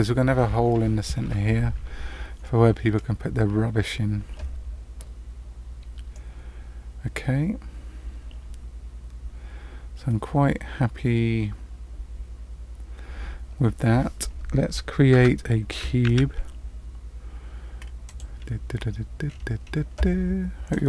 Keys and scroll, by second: 15.1 Tab, 16.0 shift+a.